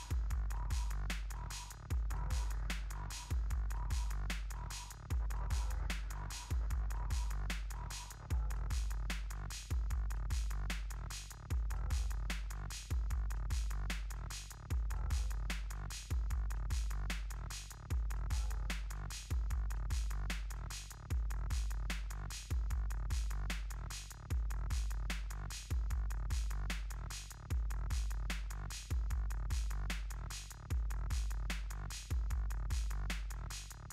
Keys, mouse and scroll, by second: 5.0 click, 10.5 click, 12.8 click, 17.6 click, 24.8 alt+scroll up 1, 25.3 scroll up 1, 25.4 click, 25.8 alt+scroll up 1, 27.0 right click, 27.5 click, 29.1-31.2 typing, 31.8 click.